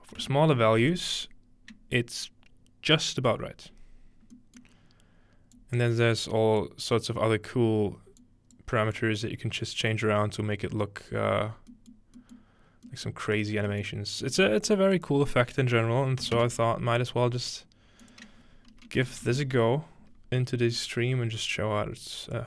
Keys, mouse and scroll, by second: 0.2-0.9 typing, 5.6-6.6 drag, 8.2 click, 9.0 click, 10.2-10.8 drag, 11.4-12.6 scroll down 2, 11.7-12.4 middle drag, 12.6 scroll up 2, 14.3 space, 14.7 click, 15.4-16.8 drag, 18.0-20.0 drag, 20.6-21.6 scroll down 2, 21.6-22.4 drag.